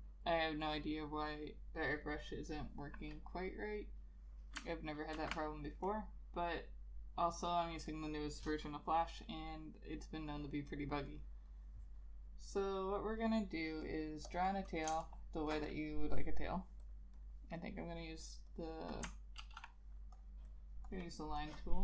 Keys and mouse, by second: 5.3 ctrl+a, 15.0 space, 17.3 double click, 19.5 ctrl+z.